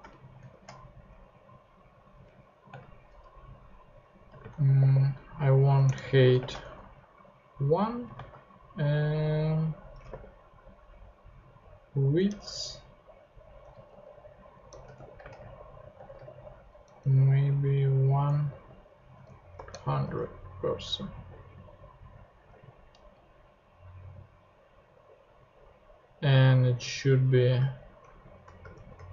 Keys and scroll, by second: 0.0 shift+Right, 0.4 shift+], 1.1 shift+Left, 1.7 Right, 2.7 space, 3.2 Left, 4.4 space, 4.8 h, 5.8 Return, 6.3-8.1 typing, 9.8-10.6 typing, 12.3 Return, 13.9-19.5 typing, 20.0 shift+super+Tab, 20.8 super+Tab, 22.5 super+Tab, 28.0 alt+shift+Down, 28.7 alt+shift+Tab.